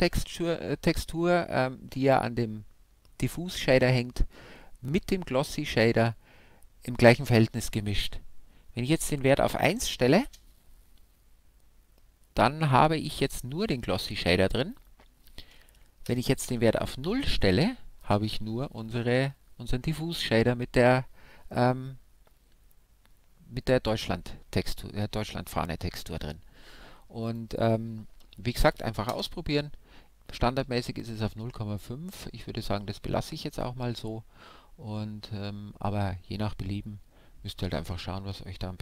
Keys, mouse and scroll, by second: 8.9-10.9 drag, 14.8-16.7 drag, 27.3-29.2 drag.